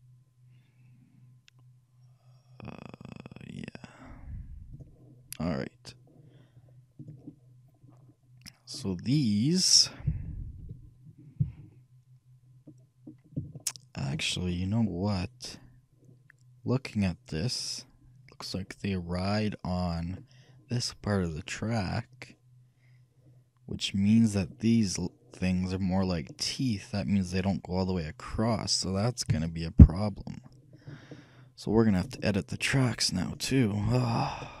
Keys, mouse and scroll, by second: 7.5 middle click, 8.3-9.3 middle drag, 9.9 middle click, 10.2 KP_3, 10.8 KP_1, 11.5 KP_3, 12.9-15.7 middle drag, 15.7-16.6 scroll up 1, 22.4 middle click, 23.3 middle click, 26.4-28.0 middle drag, 29.4 KP_3, 30.9-32.9 middle drag, 32.9-33.9 right drag, 33.3-34.6 drag.